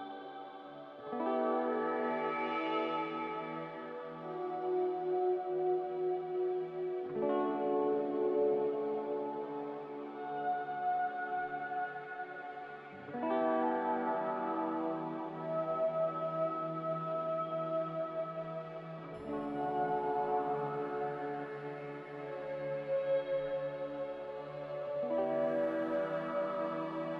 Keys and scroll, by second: 0.0 Escape, 9.6 ctrl+c, 12.7-13.4 typing, 14.5-16.8 typing, 24.6 ctrl+z.